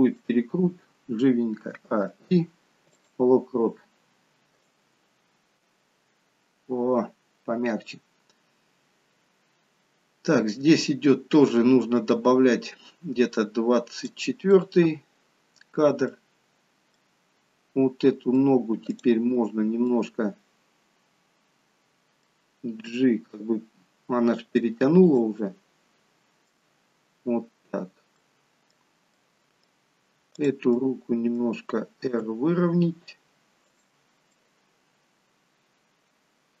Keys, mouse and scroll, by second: 1.6 a, 1.9 i, 4.7 click, 14.5 middle click, 16.4-17.0 scroll up 3, 16.9 middle click, 18.9 click, 19.8 middle click, 22.8 g, 25.3 middle click, 28.6 middle click, 29.4 middle click, 30.3 click, 30.6 middle click, 32.0 r, 34.2 middle click.